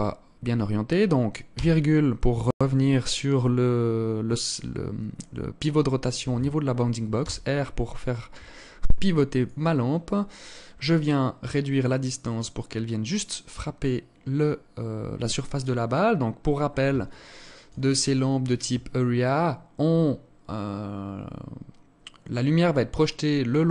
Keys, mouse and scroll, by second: 1.2 ,, 6.7 r, 10.5 click, 15.4 scroll up 2, 16.6 alt+shift+click.